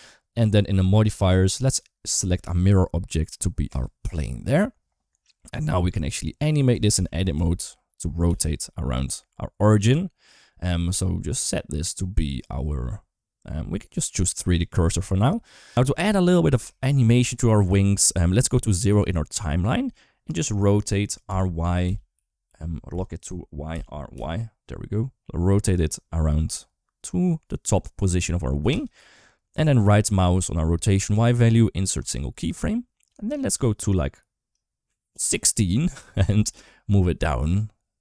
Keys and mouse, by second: 0.5 click, 2.2 click, 5.3 middle click, 6.5 Tab, 6.8 a, 7.0 r, 12.2-14.6 drag, 21.1 r, 23.5 r, 30.9-32.0 right drag, 34.3 click, 36.1 r.